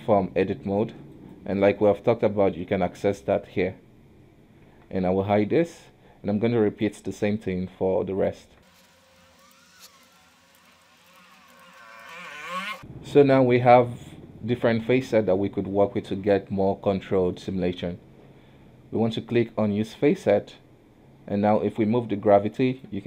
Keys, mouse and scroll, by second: 3.3-4.8 drag, 4.8 Tab, 5.6 h, 6.4 b, 8.6 Tab, 8.6-12.2 typing, 8.7 Tab, 9.4 Tab, 10.0 Tab, 10.5 Tab, 11.0 Tab, 11.5 Tab, 12.0 Tab, 12.4 Tab, 12.7 alt+h, 12.7 Tab, 13.0-15.2 middle drag, 15.2-15.8 scroll up 1, 15.8-17.0 middle drag, 17.0-17.5 scroll down 2, 17.5 middle click, 17.8-20.2 scroll up 1, 20.2 click.